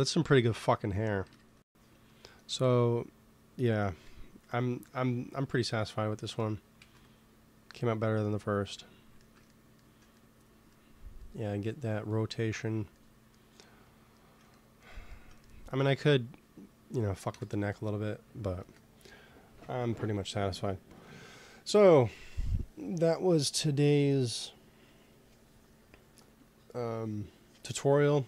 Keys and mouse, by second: 1.2 KP_1, 3.8 KP_1, 6.7 ctrl+s, 15.6 ctrl+s, 17.2 KP_1, 18.5 ctrl+s.